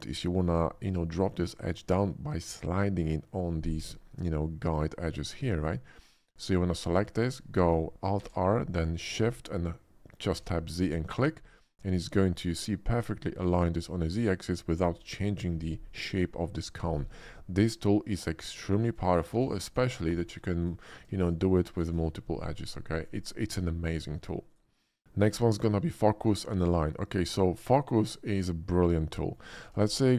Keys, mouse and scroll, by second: 5.0 click, 6.4 alt+click, 6.8 alt+click, 8.2 alt+r, 10.3 shift+z, 10.7 click, 11.5-14.4 middle drag, 14.6 alt+middle click, 14.8 alt+middle click, 18.6 shift+middle click, 19.3 ctrl+r, 19.6 ctrl+click, 19.8 click, 20.6 alt+shift+click, 21.7 alt+r, 23.0 right click, 23.4 Tab, 23.9 x, 24.0 Tab, 24.5 click, 26.5 click, 28.2 click, 28.6-29.3 middle drag, 29.8 shift+a.